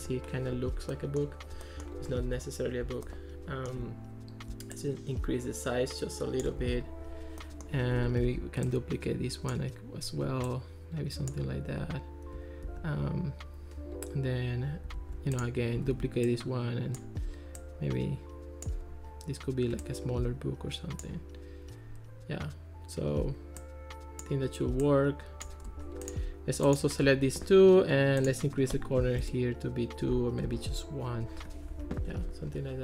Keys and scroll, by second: 8.3 super+d, 12.7 super+d, 15.0 super+z, 15.9 super+d, 29.1 2, 29.2 Return, 30.5 1, 30.6 Return, 31.7 Escape.